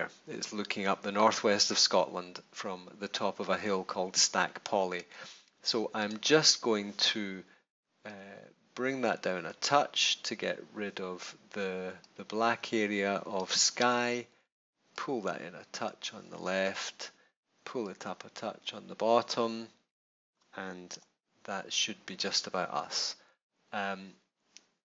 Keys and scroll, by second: 20.8 Return.